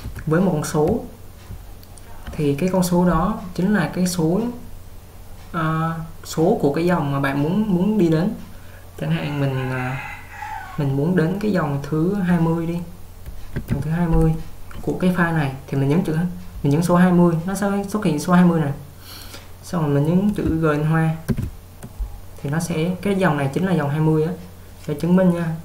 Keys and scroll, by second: 0.0-1.7 typing, 4.3 typing, 13.4-14.3 typing, 21.4 shift+g.